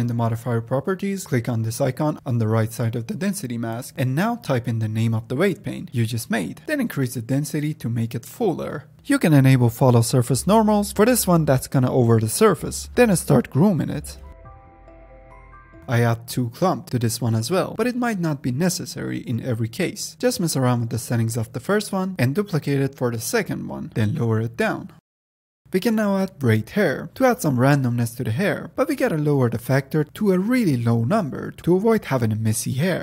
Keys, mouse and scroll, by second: 1.2 click, 2.3-6.8 drag, 6.8 middle click, 7.0-8.9 drag, 8.9 middle click, 9.0 click, 9.5 click, 10.6 click, 11.0 click, 11.3 click, 12.1 click, 12.2 middle drag, 12.3 drag, 12.5 middle click, 12.5 f, 12.6 middle click, 12.7-13.2 drag, 13.2 middle click, 13.4 click, 13.6 middle drag, 13.8-14.3 drag, 14.3 middle click, 14.4 drag, 14.6 a, 14.8 f, 14.9 drag, 15.1 middle click, 15.2 click, 15.6 middle click, 15.7-17.9 drag, 18.5-20.1 drag, 21.8-23.9 drag, 25.7-26.2 drag, 26.4 middle drag, 26.7-27.3 scroll up 2, 27.3-30.0 drag, 30.6-32.3 middle drag, 32.3 click.